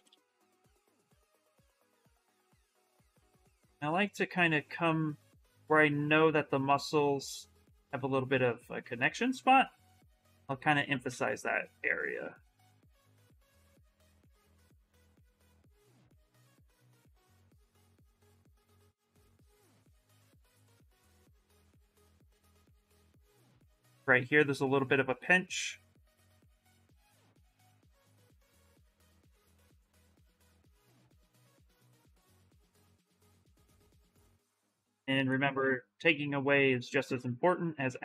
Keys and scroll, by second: 0.2 space, 19.2 s, 29.5-30.4 typing, 32.8 s.